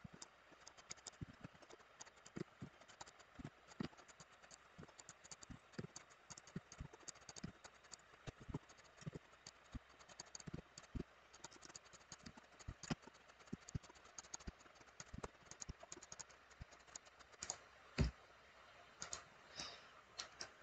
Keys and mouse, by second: 0.7 click, 0.9 click, 1.1 click, 1.4 BackSpace, 1.8 click, 2.0 click, 2.2 click, 2.9 click, 3.0 click, 3.6 click, 4.1 click, 4.3 click, 4.5 click, 5.1 click, 5.3 click, 5.7 click, 6.1 click, 6.4 click, 6.7 click, 6.9 drag, 7.2 click, 7.4 click, 7.7 click, 7.9 click, 8.7 click, 9.3 click, 10.1 click, 10.2 click, 10.4 click, 10.7 click, 11.5 middle click, 11.6 click, 11.7 click, 11.9 click, 12.0 click, 12.2 click, 12.6 click, 12.8 click, 13.2 drag, 13.4 click, 13.6 click, 14.1 click, 14.2 click, 14.4 click, 14.9 click, 15.0 click, 15.6 click, 16.0 click, 16.1 click, 16.5 click, 16.9 drag, 17.2 click, 17.4-19.0 drag, 19.6 middle click.